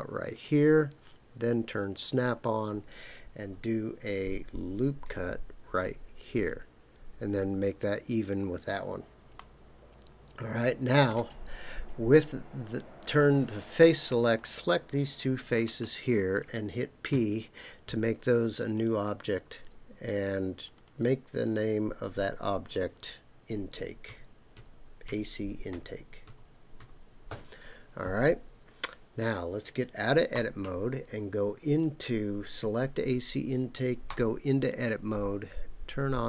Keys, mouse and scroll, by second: 0.3 click, 1.9 click, 5.0 ctrl+r, 8.2 click, 9.3-11.1 middle drag, 13.0 click, 14.3 click, 16.1 shift+click, 17.1 p, 20.5 click, 20.8-28.1 drag, 30.3 Tab, 31.7 click, 34.1 Tab, 36.1 click.